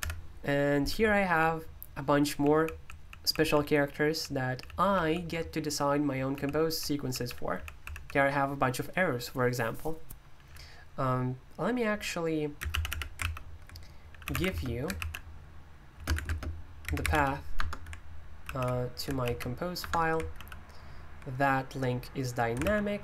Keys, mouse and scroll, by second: 0.0 Escape, 0.9 typing, 2.2 j, 3.3 j, 3.5-7.8 j, 7.8 k, 12.6-14.8 typing, 14.9 ctrl+v, 15.9-17.5 typing, 17.5 Return, 18.4 super+l, 19.2 ctrl+v, 19.8 Return, 20.3 super+l, 22.6 super+l.